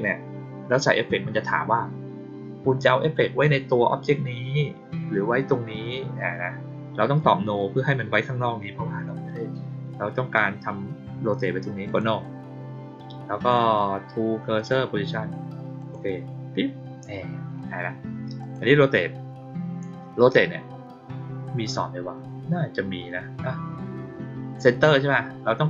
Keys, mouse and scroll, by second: 11.8 click, 14.5 click, 15.7 click, 18.3 click.